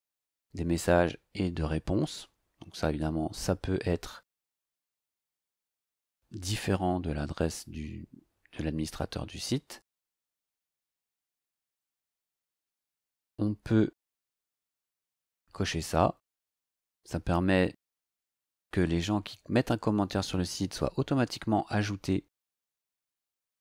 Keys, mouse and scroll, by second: 15.2 click.